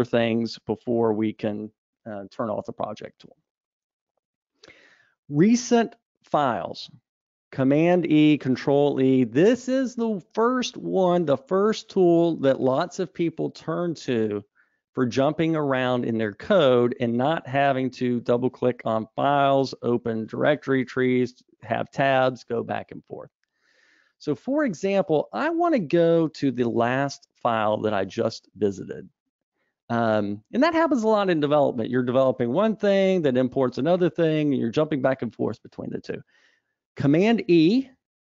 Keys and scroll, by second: 37.9 super+w.